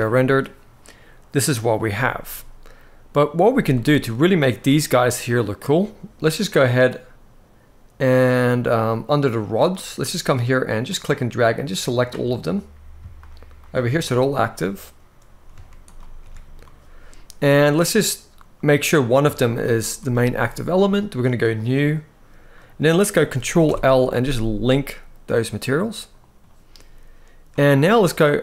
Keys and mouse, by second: 3.1 z, 3.7-4.1 middle drag, 7.8 click, 10.5-11.7 drag, 13.3 shift+drag, 15.5 ctrl+shift+click, 18.2-18.5 middle drag, 19.1 shift+click, 19.6 shift+click, 21.3 click, 22.2-22.9 middle drag, 23.3 ctrl+l.